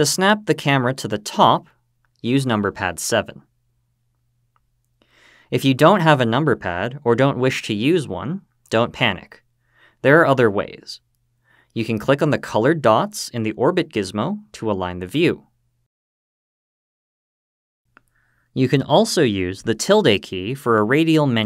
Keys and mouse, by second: 1.7 KP_7, 16.6 click, 18.0-19.3 drag.